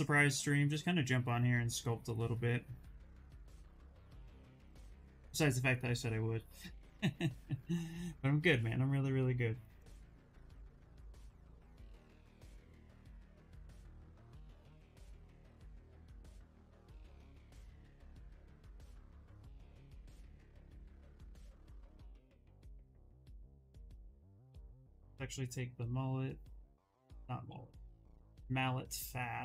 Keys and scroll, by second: 16.1 ctrl+z, 25.5 s, 27.8 s.